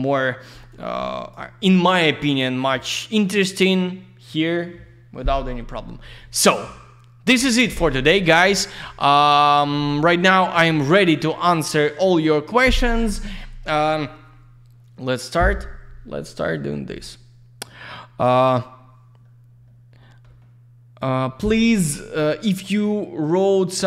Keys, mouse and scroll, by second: 0.6 click, 10.3 click.